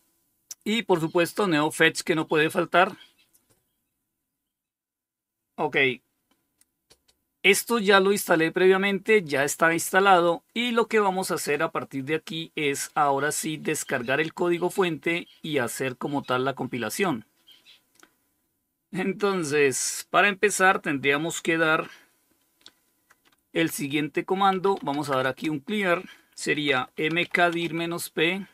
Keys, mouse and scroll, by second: 0.6-2.1 drag, 9.4 click, 23.5-28.0 typing.